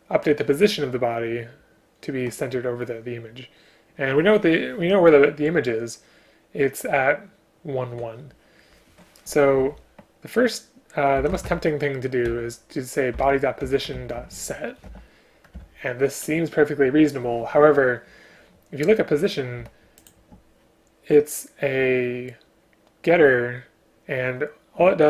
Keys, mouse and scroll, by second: 13.7 Return, 15.6 Return, 20.0 click.